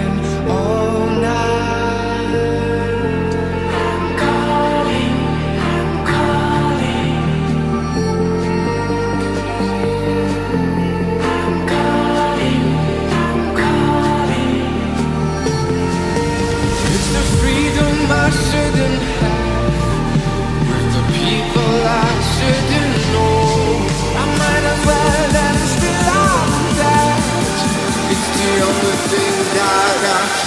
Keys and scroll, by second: 11.7 Return, 25.4 [, 27.0 ], 29.5 ctrl+z.